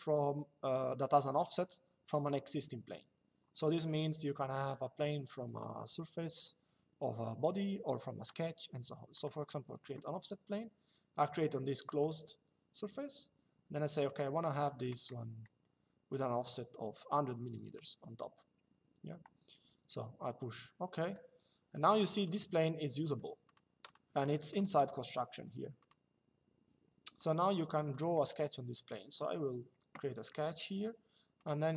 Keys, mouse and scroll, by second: 8.9 click, 11.7 click, 13.8 click, 15.8 click, 20.8 click, 22.0 click, 25.5 click, 26.9 click, 28.9 click, 30.0 middle click, 31.1 click.